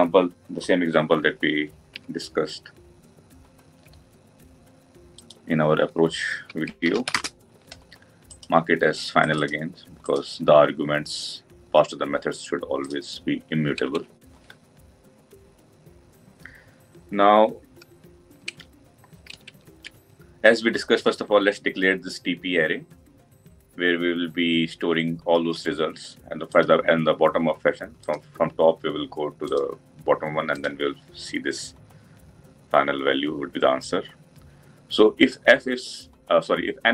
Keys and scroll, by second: 13.6 Tab.